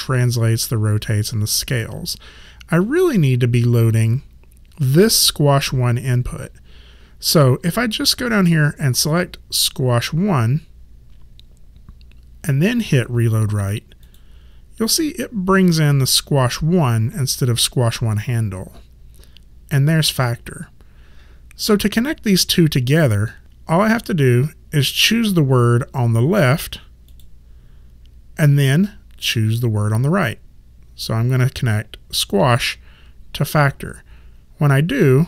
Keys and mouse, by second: 9.6 click, 14.1 click, 27.1 click.